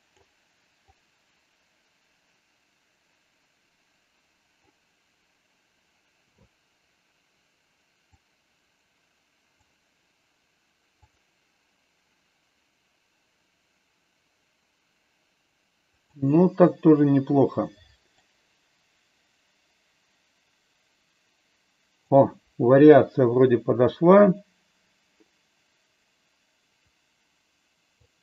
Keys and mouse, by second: 0.9-4.6 drag, 8.1-9.4 drag, 13.6 click, 18.2-21.9 drag, 24.3-27.9 drag.